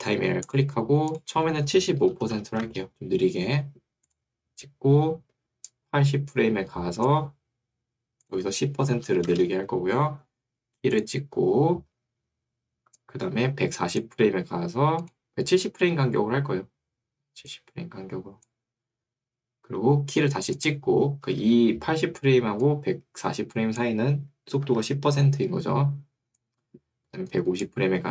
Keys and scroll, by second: 2.1-3.0 typing, 9.1 0, 9.3 Return, 24.7 Escape.